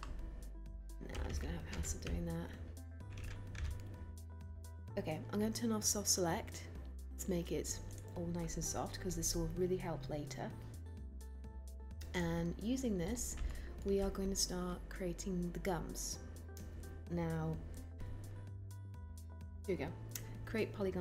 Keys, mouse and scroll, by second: 3.1-4.1 typing.